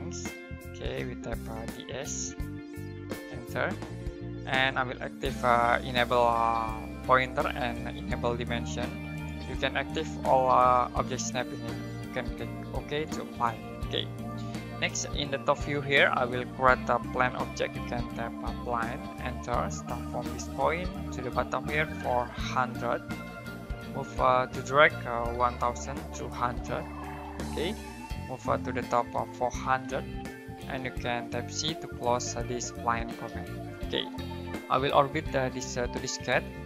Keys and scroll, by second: 0.1 Escape, 16.8-19.0 typing, 22.2-23.0 typing, 25.2-26.3 typing, 28.9-30.6 typing, 32.1-33.1 typing.